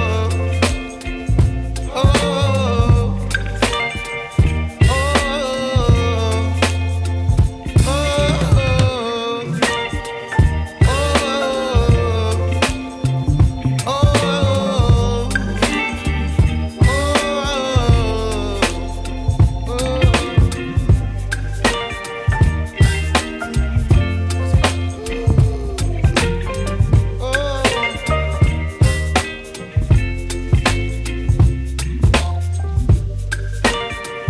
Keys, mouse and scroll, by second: 0.4 ctrl+shift+a, 5.8 click, 17.2 click, 23.4 click, 23.9 click, 27.0 click, 27.4 ctrl+e, 28.4 ctrl+j.